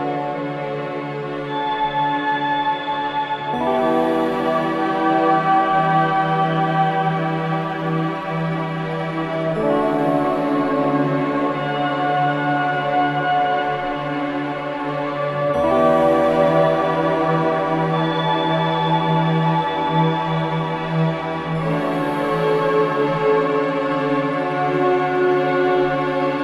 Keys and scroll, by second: 9.8 v, 12.0 ctrl+shift+], 17.9 ctrl+shift+], 21.7 ctrl+KP_0.